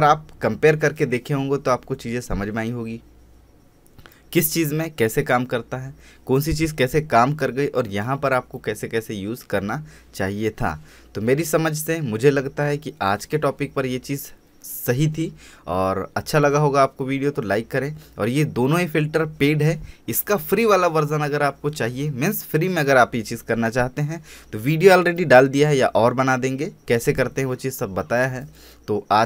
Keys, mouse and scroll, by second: 0.3 space, 0.7-1.2 alt+scroll up 1, 1.3-29.2 drag.